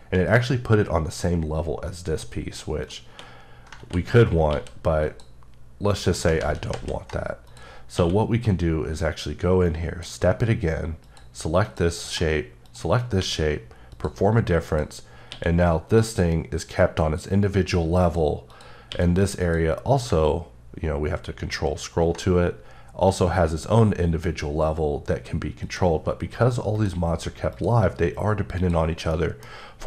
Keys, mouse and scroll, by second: 2.8 click, 3.1 2, 5.0 click, 6.0 right click, 6.4 ctrl+z, 7.4 click, 7.9 q, 9.7 click, 11.0 click, 13.2 q, 13.9 click, 15.3 q, 15.9 click, 18.0 click, 18.9 q, 19.4 click, 20.7 ctrl+scroll up 1, 24.6 scroll up 1, 25.6 click, 29.2 middle click, 29.6 scroll up 2.